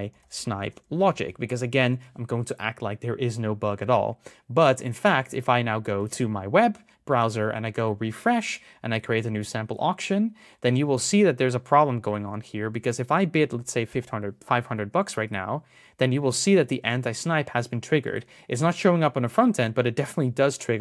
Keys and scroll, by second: 7.1 super+r.